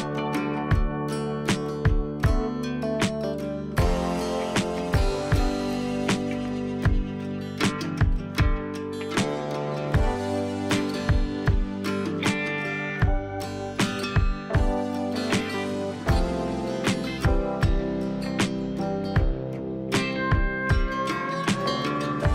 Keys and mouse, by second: 2.2-3.2 middle drag, 3.2-5.9 drag, 5.9 middle click, 6.2-10.4 drag, 10.4 middle click, 10.5-15.3 drag, 11.2 shift+space, 14.6 shift+space, 15.3-17.6 shift+middle drag, 15.6 shift+space, 17.6-21.0 drag, 20.2 shift+space, 21.0 middle click, 21.1-22.1 drag, 22.1 middle click.